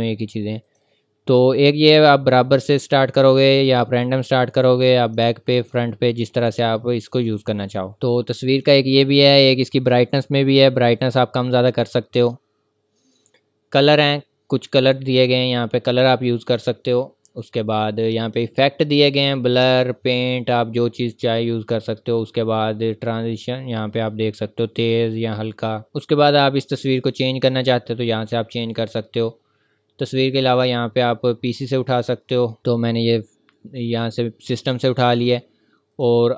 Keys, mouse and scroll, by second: 3.4 click, 12.2 click, 16.4 click, 21.0 click, 25.8 click, 27.8 click, 31.9 click, 32.9 scroll up 1, 34.7 click.